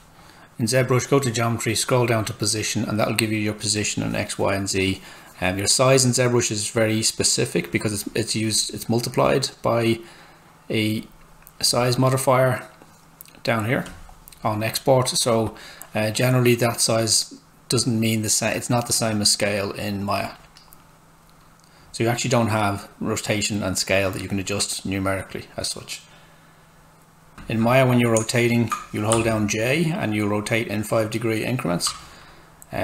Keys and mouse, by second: 2.8 click, 5.4 click, 11.0 click, 27.1-27.8 typing, 29.1-30.8 typing, 29.6 click.